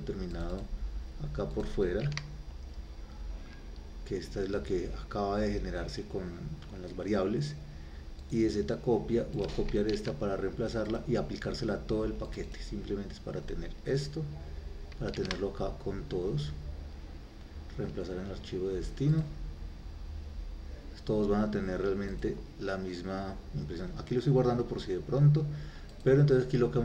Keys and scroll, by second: 2.1 ctrl+v, 10.0 ctrl+c, 15.2 ctrl+v.